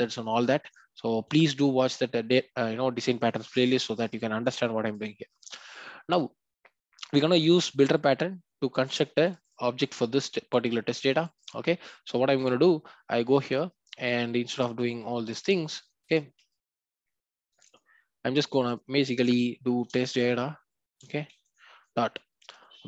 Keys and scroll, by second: 15.3 ctrl+y.